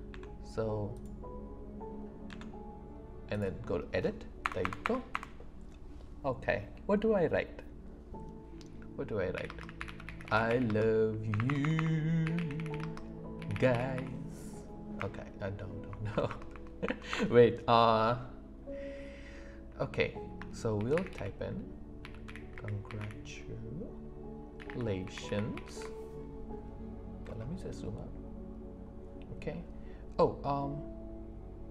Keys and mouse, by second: 0.1 Tab, 4.4 BackSpace, 9.3-14.9 typing, 20.7 shift+c.